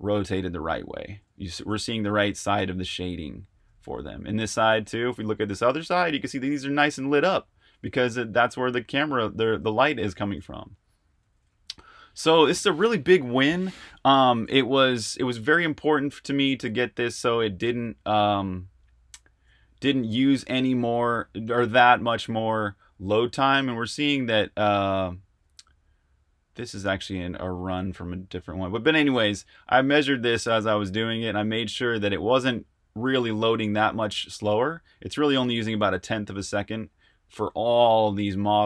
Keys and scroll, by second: 0.0-12.8 typing, 15.0 super+Tab, 38.1-38.6 typing.